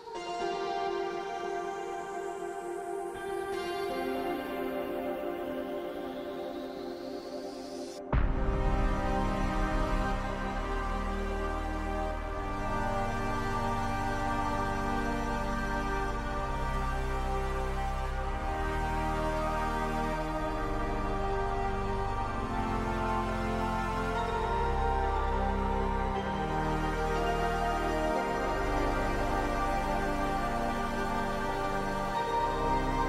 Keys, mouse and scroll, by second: 2.6 ctrl+v, 3.2 BackSpace, 3.3 Home, 3.4 Delete, 3.6 Return, 6.4 middle click, 7.9 alt+w, 8.3 alt+middle click, 12.7 alt+middle click, 14.3 alt+middle click, 20.4 s, 24.2 alt+middle click, 25.2 s, 27.5 r, 32.2 middle click, 32.4 w.